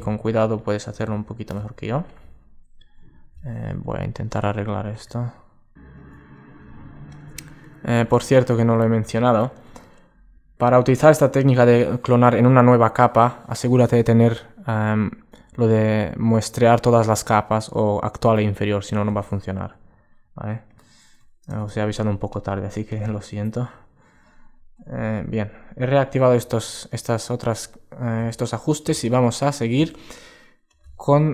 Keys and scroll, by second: 20.0 alt+space, 26.1 alt+space.